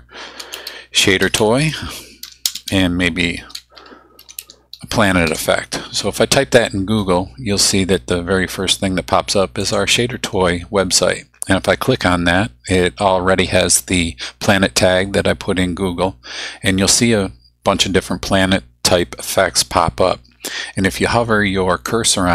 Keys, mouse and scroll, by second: 0.1-4.9 typing, 5.3 Return, 9.6 click.